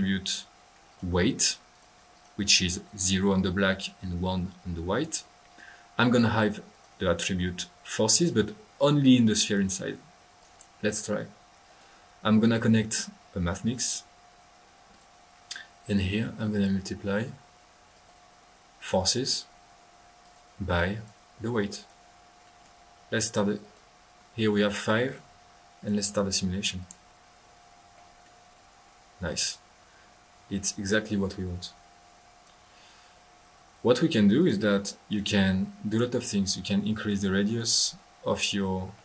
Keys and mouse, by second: 0.9 click, 1.7-2.5 drag, 5.4-6.2 middle drag, 6.3 middle click, 6.7 click, 7.4-7.9 drag, 8.0 middle click, 10.4 click, 11.4 typing, 11.6 right click, 13.6-14.0 drag, 14.9 click, 16.5 click, 16.8 click, 17.9-18.5 drag, 18.8 click, 20.2 click, 20.9-21.3 drag, 21.7 click, 22.5 middle click, 23.6 drag, 24.5-24.9 drag, 25.7-26.1 drag, 26.8 click, 27.9 middle click, 29.4-32.6 drag, 34.3 click, 35.0-35.4 drag, 35.9 drag.